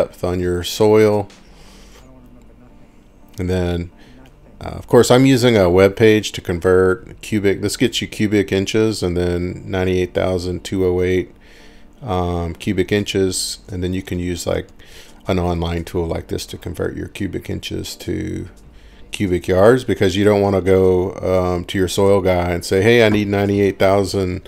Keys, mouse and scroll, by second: 0.7 click, 1.9 click, 2.5 click, 3.6 click, 4.4 click, 5.2 click, 6.0 click, 6.2 click, 7.0 click, 10.3 click, 12.4 click, 12.5 click, 13.8-15.9 typing, 18.8 click, 19.6-22.8 typing.